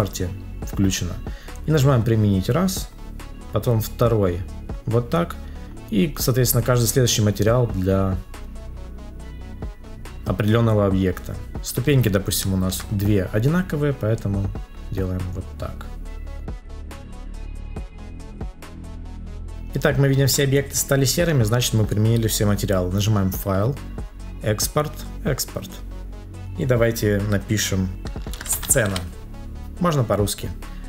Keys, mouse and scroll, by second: 12.4 ctrl+click, 17.4 ctrl+click, 18.7 ctrl+click, 19.5 ctrl+s.